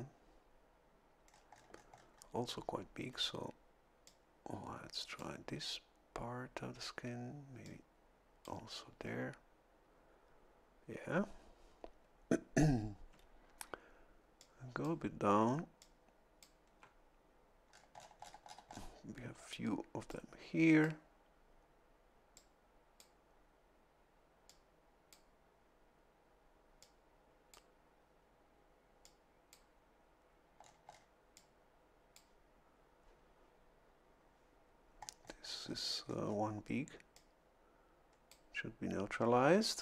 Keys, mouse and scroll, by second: 1.3-2.4 scroll up 2, 4.1-5.4 drag, 7.6-8.6 drag, 13.1 a, 14.4 click, 15.8 click, 17.7-18.9 scroll down 2, 20.1 click, 22.4 click, 24.5 click, 26.8 click, 29.1 click, 30.6-31.1 scroll down 1, 31.3-32.3 drag, 35.0-36.5 scroll up 1, 37.1-38.5 drag.